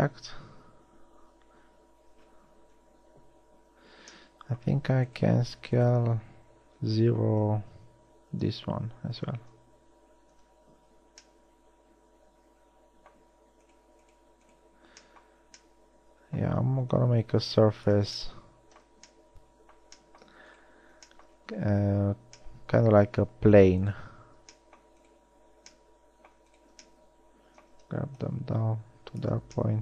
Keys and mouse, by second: 3.0 KP_1, 8.6 s, 13.9-15.9 middle drag, 17.2-18.9 middle drag.